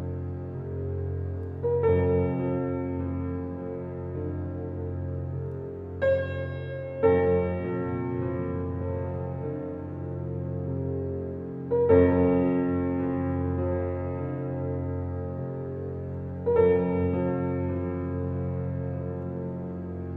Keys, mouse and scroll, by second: 0.9 click, 1.9 click, 2.2 scroll down 1, 3.0 scroll up 1, 3.9 right click, 4.8 click, 5.1 scroll down 1, 6.4 scroll up 1, 7.7 click, 8.0-8.3 scroll down 1, 8.8-9.3 scroll up 1, 10.6 click, 10.9-11.2 scroll down 1, 12.2 scroll up 1, 13.0 click, 13.6 scroll up 1, 14.0 right click, 14.9 click, 15.2-15.5 scroll down 1, 16.2-16.6 scroll up 1, 17.6 click, 17.9 scroll down 1, 19.8 scroll up 1, 19.8 click.